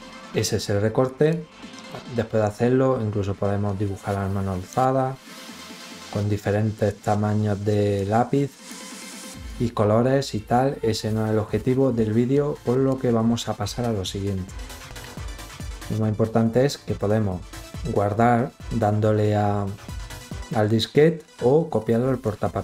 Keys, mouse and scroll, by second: 1.0 click, 3.3-4.4 drag, 5.0 click, 6.7 click, 8.3 click, 12.0 click, 21.8 click.